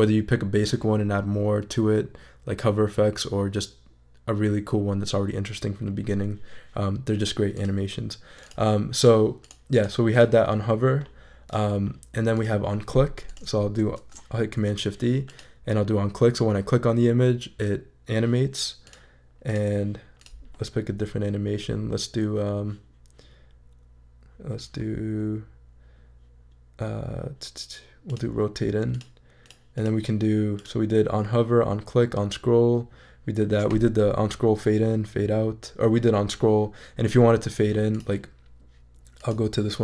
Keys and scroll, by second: 14.0 shift+super+e.